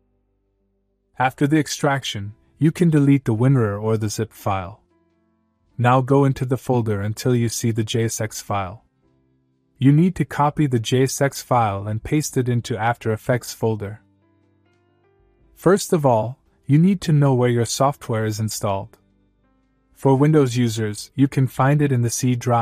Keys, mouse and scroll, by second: 0.8 click, 1.6 click, 3.3 click, 7.0 click, 8.6 click, 9.4 click, 11.2 right click, 13.7 click, 22.1 click.